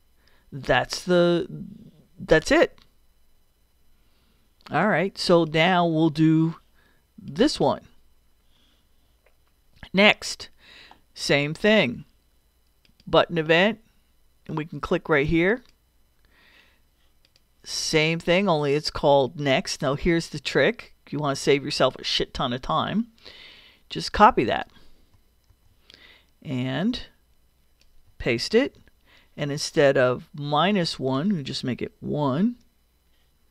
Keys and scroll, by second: 25.5 super+c, 28.6 super+v.